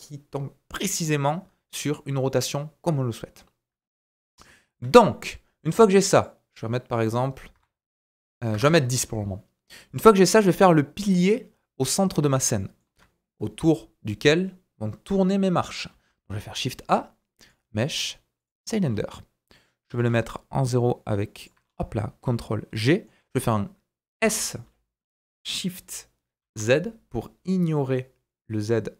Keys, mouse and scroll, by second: 4.1 scroll up 1, 4.5 shift+middle click, 4.9-5.2 scroll up 2, 5.2 scroll down 1, 6.1 click, 9.7 middle click, 10.4 KP_1, 11.9-12.4 scroll up 3, 12.2-21.5 shift+drag, 12.6 shift+middle click, 15.9 shift+a, 18.8-19.2 scroll up 2, 19.2 scroll down 1, 19.9 g, 21.5-28.9 middle drag, 21.6-22.1 scroll up 2, 22.1-22.7 scroll down 2, 23.2-23.8 scroll down 2, 23.8-24.2 scroll down 1, 24.2 s.